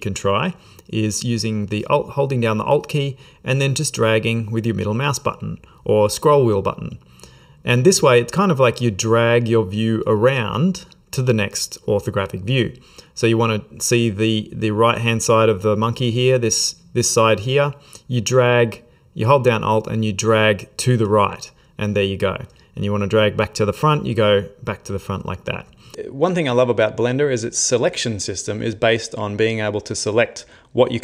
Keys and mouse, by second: 3.6 alt+middle click, 4.5 alt+middle click, 5.5 alt+middle click, 6.9 alt+middle click, 9.0 alt+middle click, 10.0 alt+middle click, 11.1 alt+middle click, 11.9 alt+middle click, 20.8 alt+middle click, 23.9 alt+middle click.